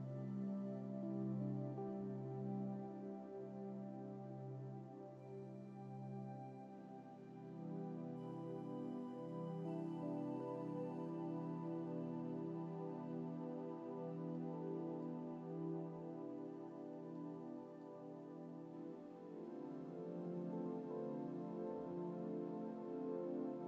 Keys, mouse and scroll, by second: 8.1-8.6 scroll up 2, 8.8-9.3 scroll down 1, 14.4-15.2 middle drag, 15.3-15.6 scroll up 2, 17.3-18.1 middle drag, 19.7 scroll up 1, 22.4-22.9 scroll down 2, 23.1 scroll down 1.